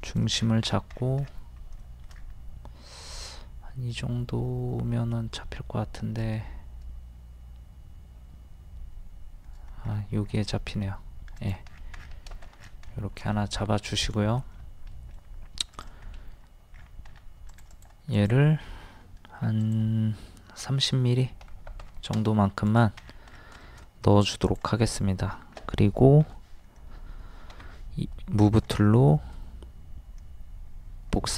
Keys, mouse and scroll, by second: 0.1 click, 0.4 scroll down 1, 2.2-2.6 scroll down 1, 9.9-10.2 scroll up 1, 11.4 click, 11.7 scroll down 1, 12.1-12.6 scroll up 1, 12.6-12.9 scroll down 2, 12.9 shift+middle click, 13.4 middle click, 14.5-15.6 middle drag, 15.7 click, 16.0 scroll up 1, 17.5 click, 19.2 d, 19.6 click, 21.4 KP_3, 21.5 KP_0, 22.7 click, 23.0 scroll down 1, 23.6 shift+middle click, 24.5 click, 24.8-25.2 scroll up 1, 27.5 m, 28.5 ctrl+click, 29.1 middle click.